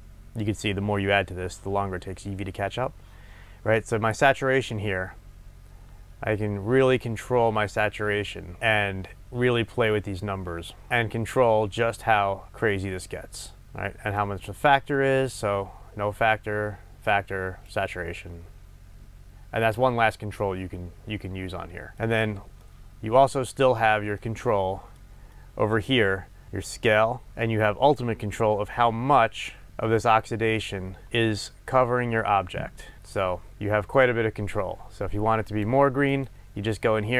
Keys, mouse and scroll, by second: 4.4-21.9 drag, 21.9-26.5 middle drag, 26.5 click, 27.3-29.6 middle drag, 28.2-29.6 scroll up 2, 29.6-37.1 drag.